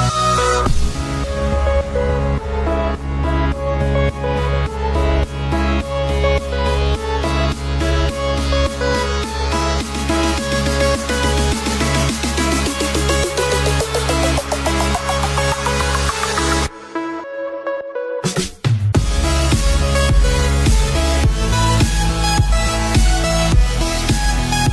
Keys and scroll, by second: 16.7 Delete, 17.6 Delete.